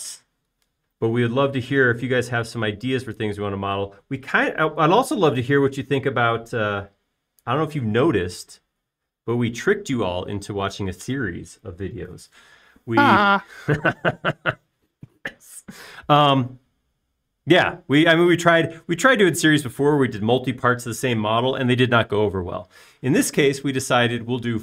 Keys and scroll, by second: 3.6 p, 9.2 space.